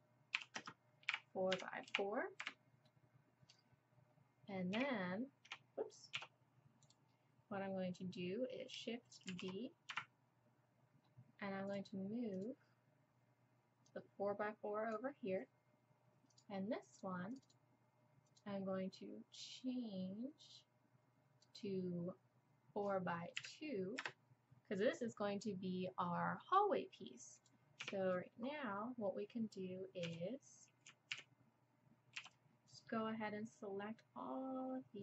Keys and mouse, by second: 2.4-6.8 middle drag, 4.8 Tab, 6.2 Tab, 6.8 click, 9.3 shift+d, 11.7-19.4 drag, 27.4-31.0 drag, 27.8 Tab, 30.1 z, 31.1 a, 32.2 b.